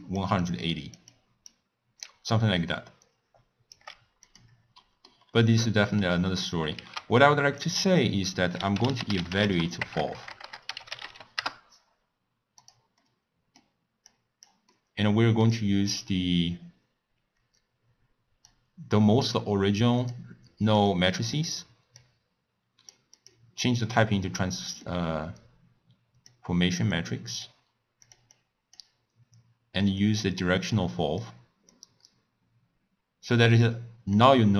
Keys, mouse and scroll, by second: 0.0-2.0 typing, 0.0 click, 0.5 click, 1.2 click, 2.7-3.8 right drag, 3.8 d, 3.9 d, 4.3 click, 4.9 middle click, 5.3-5.7 scroll up 1, 5.7-6.8 middle drag, 6.8 ctrl+a, 10.0 BackSpace, 10.2 BackSpace, 10.5 BackSpace, 13.1-14.2 middle drag, 14.2 click, 14.8-17.8 middle drag, 18.5 drag, 21.4-23.9 drag, 23.9-24.9 scroll up 1, 24.9 click, 27.0 click, 28.1 click, 28.4-30.2 drag, 31.8 click, 34.3 click.